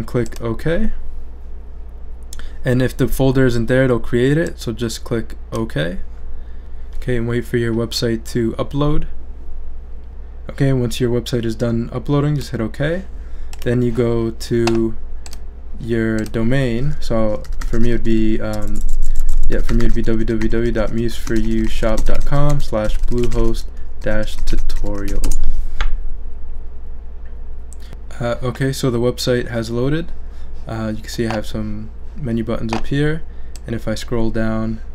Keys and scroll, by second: 17.5-25.6 typing.